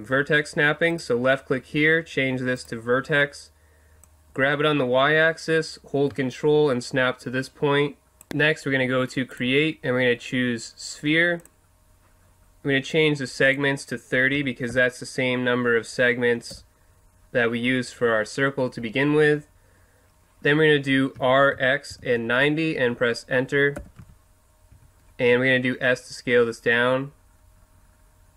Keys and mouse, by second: 0.9-2.8 drag, 4.0-5.9 drag, 9.3-11.2 drag, 11.4-13.4 drag, 13.5-15.4 drag, 18.6 middle click, 21.1 r, 24.0 z, 24.7 z, 25.2 s.